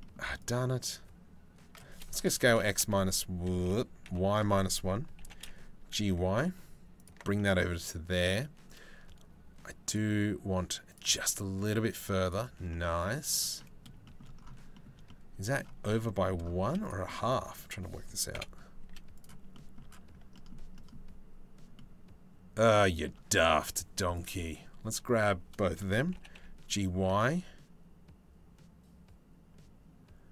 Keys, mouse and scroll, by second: 0.0 shift+middle click, 1.9 s, 4.8 g, 7.0 middle click, 9.5 middle click, 10.5 middle click, 12.3 middle click, 13.2 middle click, 13.6 shift+middle click, 14.4 shift+middle click, 15.5 shift+middle click, 16.2 z, 18.0 KP_7, 18.4 z, 19.1 shift+middle click, 20.0 shift+middle click, 20.4 shift+middle click, 25.8 g.